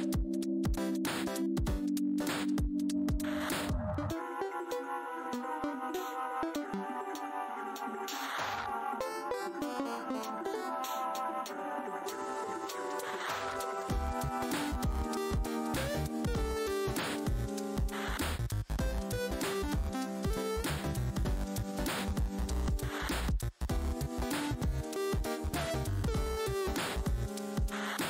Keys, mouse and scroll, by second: 0.6 click, 1.4 shift+right click, 2.2 alt+click, 6.4 w, 7.0 click, 7.3 shift+right click, 9.7 shift+right click, 11.1 r, 12.8 click, 13.5 right click, 13.9 click, 14.3 ctrl+right click, 15.8 click, 18.3 scroll up 1, 19.8 click, 21.3 shift+right click, 23.2 click, 23.4 shift+right click, 23.6 scroll up 1, 23.6 r, 25.6 w, 26.1 w, 26.7 right click, 27.2 alt+click, 27.7 right click.